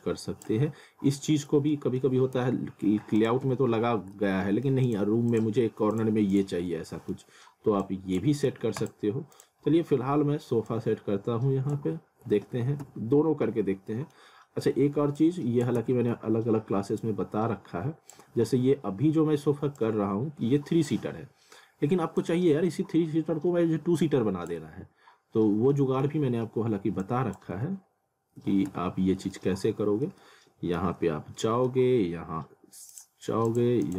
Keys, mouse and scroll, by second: 1.4 scroll up 1, 1.7 alt+middle click, 2.4 z, 3.2 click, 3.4 z, 3.9 scroll down 1, 4.1 middle click, 4.9 click, 5.9 ctrl+click, 6.6 scroll down 1, 6.9 alt+middle click, 7.8 click, 8.5 z, 8.8 click, 9.7 scroll down 1, 10.7 click, 11.8 z, 12.3 w, 12.8 z, 13.3-13.9 scroll down 1, 13.9 middle click, 14.3-14.8 scroll up 1, 15.2 click, 15.6-16.6 typing, 17.0 click, 18.2-18.6 typing, 19.8 click, 20.9 w, 21.6 scroll up 1, 22.2 click, 25.4 scroll down 1, 25.7 middle click, 27.0 click, 27.6 w, 28.7 z, 29.2 scroll down 1, 29.3 alt+middle click, 30.2 alt+middle click, 30.9 scroll up 1, 31.4 alt+middle click, 32.9 click.